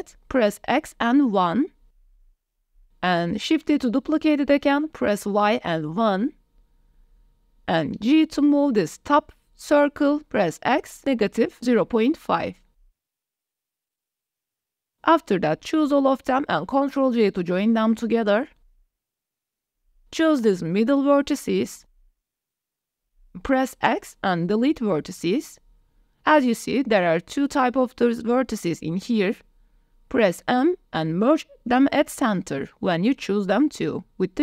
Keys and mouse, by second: 0.3 x, 1.6 KP_1, 2.7 KP_Enter, 3.6 shift+drag, 4.5 shift+d, 5.2 y, 6.5 KP_1, 7.1 KP_Enter, 7.9 shift+middle drag, 9.3 g, 10.1 x, 12.2 KP_Subtract, 13.5 KP_Decimal, 13.8 KP_5, 14.4 KP_Enter, 15.9-16.5 drag, 18.6 ctrl+j, 21.1 Tab, 21.6 shift+click, 22.1 click, 23.1 shift+click, 23.4 shift+click, 24.0 shift+click, 25.0 x, 28.0 click, 28.9 shift+click, 30.6 m, 33.6 shift+click.